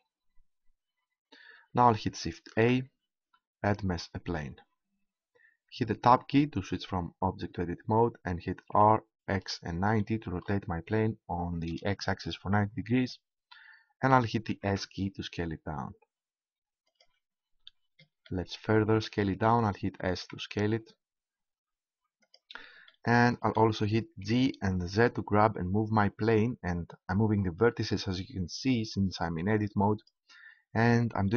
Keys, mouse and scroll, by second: 2.6 shift+a, 6.7 Tab, 8.7 r, 14.5 s, 16.9-18.8 drag, 20.0 s, 22.9-24.3 drag, 24.3 g, 30.0-31.3 drag.